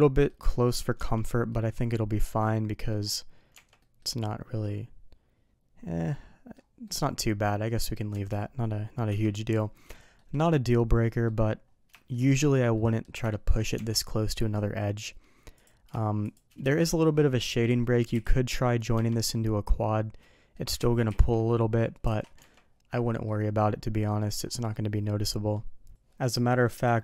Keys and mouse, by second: 0.0 middle click, 0.9 Tab, 1.4 middle click, 2.4-2.8 middle drag, 3.5 Tab, 3.7 middle click, 4.6-6.5 middle drag, 6.8 middle click, 7.6 middle drag, 8.1 Tab, 9.0 KP_3, 9.9 shift+middle drag, 10.9 middle drag, 11.9 shift+middle drag, 12.7-13.0 middle drag, 13.2 shift+middle drag, 15.5 click, 18.9 Tab, 19.2-20.5 middle drag, 20.8 ctrl+z, 21.5 middle click, 22.0 alt+a, 22.3 Tab, 22.9 middle drag, 24.0 middle drag, 24.9-25.5 middle drag.